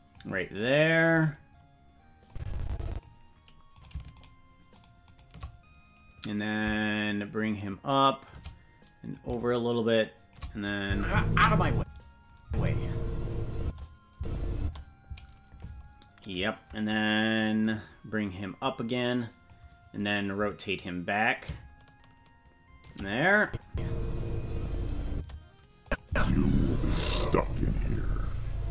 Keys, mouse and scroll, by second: 2.2 click, 3.8-6.5 right drag, 6.5-8.3 drag, 9.1-10.3 drag, 10.8 space, 11.7 space, 13.6 space, 14.1 space, 14.6 space, 18.6 click, 20.7-22.8 drag, 23.4 click, 23.6 space, 25.1 space, 25.8 click, 26.0 space.